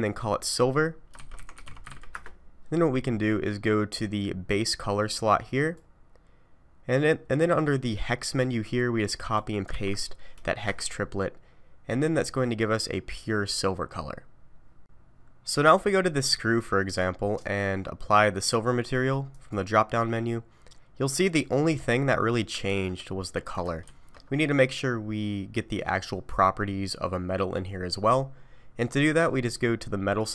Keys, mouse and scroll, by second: 3.1-3.5 scroll down 2, 5.5 click, 17.4 click, 20.7 middle click, 22.9 ctrl+z, 24.0 ctrl+z, 28.8-30.3 scroll down 6.